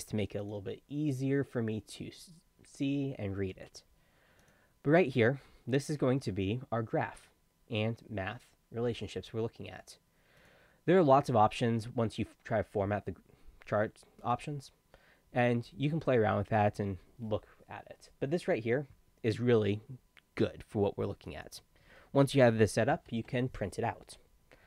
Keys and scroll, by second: 22.9 ctrl+p.